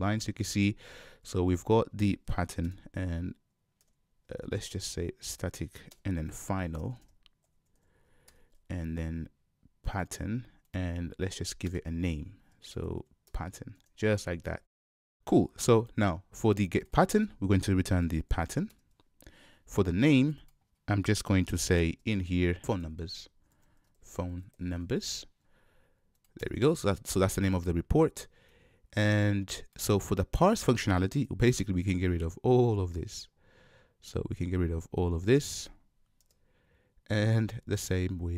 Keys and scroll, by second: 2.7 ctrl+space, 8.4 Return, 11.6 Return, 11.7 ctrl+shift+space, 13.3 Return.